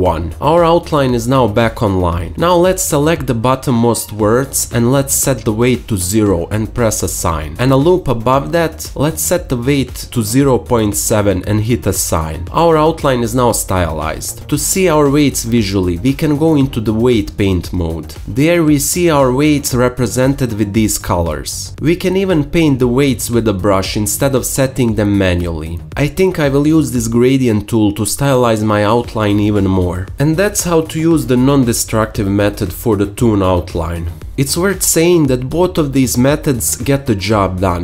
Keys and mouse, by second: 12.8-13.8 alt+drag, 14.8 Tab, 15.2 alt+click, 20.5-23.2 alt+drag, 23.2 n, 23.3 ctrl+z, 25.0 ctrl+z, 28.2 ctrl+z, 33.1 n, 33.1 t, 34.7-35.2 ], 35.8 alt+middle click, 36.3 alt+middle click.